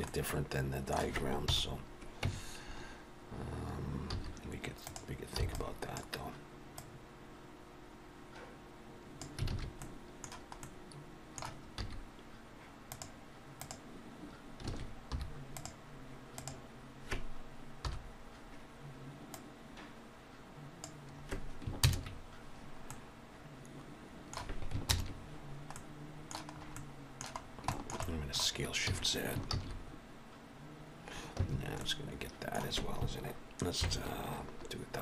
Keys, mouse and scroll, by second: 0.0 middle click, 1.2 KP_1, 2.1 Tab, 4.0 z, 5.3 b, 6.7 click, 9.4 alt+a, 9.7 middle click, 10.5 middle click, 11.7 z, 13.5 click, 14.6 alt+a, 15.0 3, 15.4 click, 16.3 click, 17.7 KP_1, 19.2 click, 21.7 ctrl+KP_Add, 22.8 middle click, 24.9 ctrl+KP_Add, 25.6 middle click, 26.4 scroll up 3, 26.6 middle click, 27.3-27.6 scroll down 2, 27.6 shift+middle click, 27.9 middle click, 28.8 s, 31.7 middle click, 33.7 ctrl+KP_Subtract.